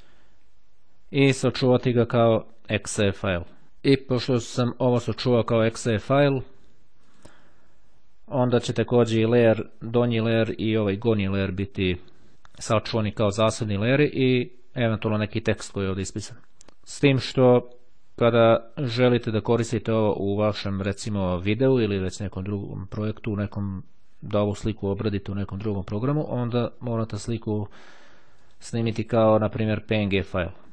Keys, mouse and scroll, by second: 5.6 click, 6.9 click, 9.0 click, 10.2 click, 27.9-29.0 drag.